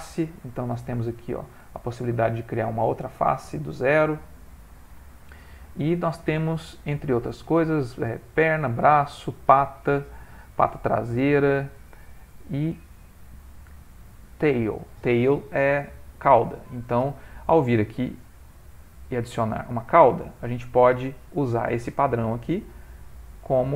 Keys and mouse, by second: 0.6 middle click, 1.2 shift+middle click, 1.7 ctrl+middle click, 2.3 middle click, 4.1 x, 6.1 click, 6.8 click, 10.1 click, 11.1 click, 15.6 click, 15.6 middle click, 16.1 ctrl+middle click, 16.6 shift+middle click, 17.0 middle click, 18.9 click, 20.1 shift+middle click, 22.3 click, 22.9 g.